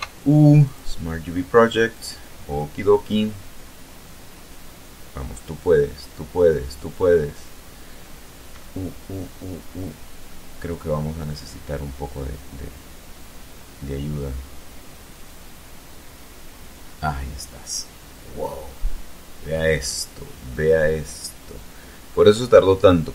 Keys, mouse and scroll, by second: 0.1 click, 1.4 click, 18.2-18.7 scroll down 1, 19.0-19.3 scroll up 1, 19.8-20.2 scroll up 1, 21.0 scroll down 1, 21.5 scroll down 1.